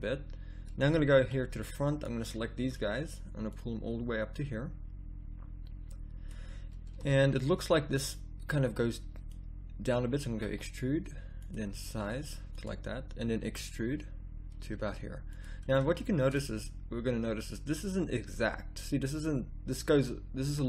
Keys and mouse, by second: 1.4 b, 8.1-10.4 drag, 10.4 e, 11.7 s, 13.4 e.